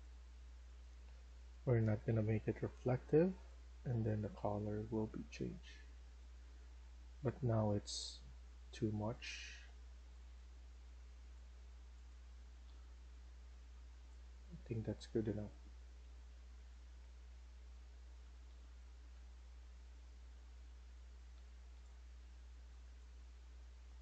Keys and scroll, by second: 7.7-8.2 typing, 12.1-13.4 typing, 16.4-19.8 typing, 20.9-22.6 typing.